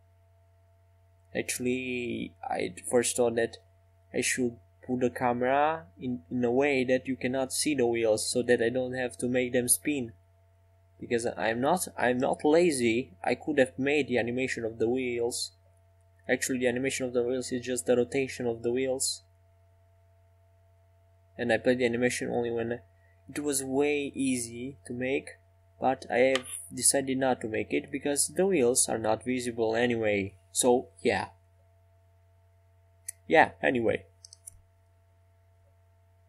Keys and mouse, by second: 4.1-5.2 right drag, 5.2 Tab, 7.6-9.1 right drag, 9.1-11.1 middle drag, 11.1-12.6 right drag, 11.4-14.2 drag, 12.9 s, 14.5 middle click, 20.1 ctrl+r, 28.1 ctrl+r.